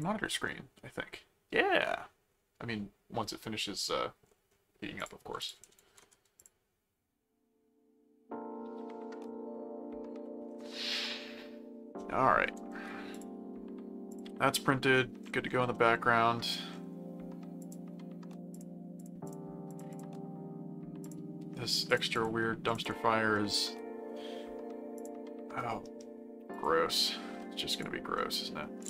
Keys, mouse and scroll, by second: 0.0 click, 5.0 click, 5.7 ctrl+w, 6.4 click, 13.1 click, 14.1 click, 15.7 middle click, 17.6 click, 18.5-20.4 drag, 21.0 click, 21.7-23.4 drag, 23.3 middle click, 24.9 click, 25.7 middle click, 26.5 click, 27.0 middle click, 27.7 click, 28.2 middle click.